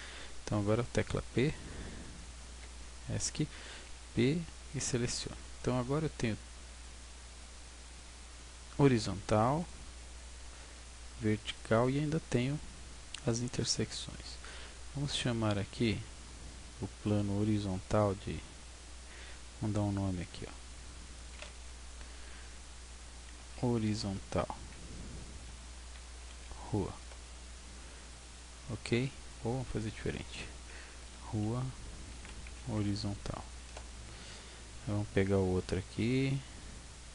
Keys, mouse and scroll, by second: 3.8 p, 5.4 Tab, 6.7 right click, 7.8 right click, 9.6 right click, 11.4 right click, 15.7 right click, 20.2 click, 21.1 click, 29.6 click, 35.8 right click.